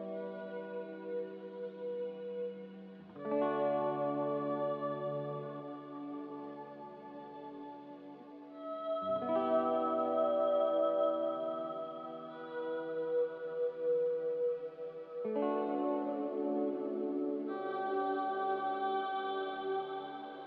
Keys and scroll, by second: 0.1 7, 2.4-3.1 typing, 4.4-5.1 typing, 6.4-7.2 typing, 16.7 ctrl+c.